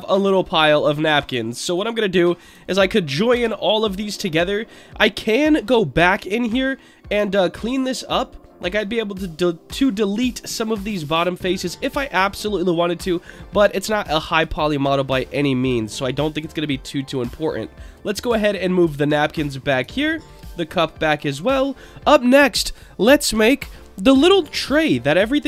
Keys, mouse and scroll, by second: 2.0-2.5 scroll up 2, 3.3 ctrl+j, 3.8-4.3 scroll up 2, 4.3-4.8 middle drag, 4.8-5.6 scroll up 4, 5.9 Tab, 6.4 middle click, 7.3 shift+middle click, 10.3 click, 11.0 click, 12.1 middle click, 13.2-13.6 scroll down 3, 13.6 Tab, 13.9 scroll down 3, 14.5-14.9 shift+middle drag, 15.6 shift+click, 15.9-16.6 scroll down 2, 16.8-17.9 drag, 18.2-18.6 middle drag, 19.1-19.7 drag, 19.9 shift+click, 20.6 click, 21.4 click, 21.8-22.5 middle drag, 24.8 click.